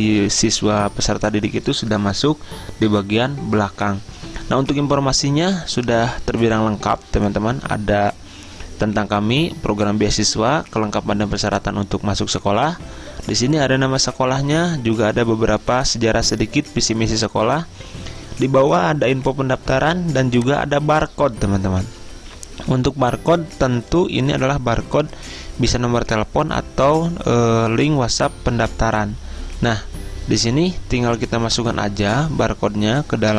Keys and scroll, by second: 32.3 alt+Tab.